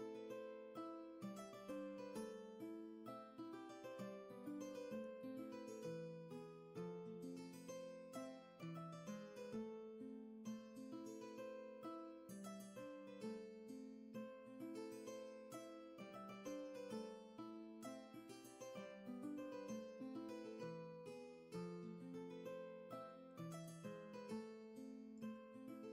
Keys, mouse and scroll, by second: 12.5 ctrl+z, 14.5 ctrl+z.